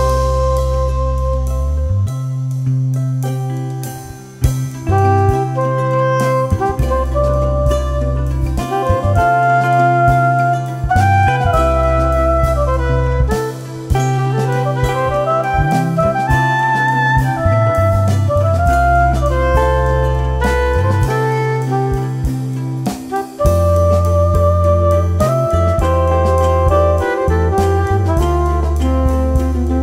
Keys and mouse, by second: 2.6 q, 3.0 shift+F6, 6.4 click, 10.9 click, 11.1 z, 11.4 click, 13.1-15.2 typing, 14.1 click, 15.3 click, 16.2 3, 16.5 click, 17.4-17.7 typing, 17.5 click, 17.8 click, 19.0 z, 19.1 click, 22.2 z, 22.6 click, 27.3-29.8 typing, 29.2 click, 29.6 click.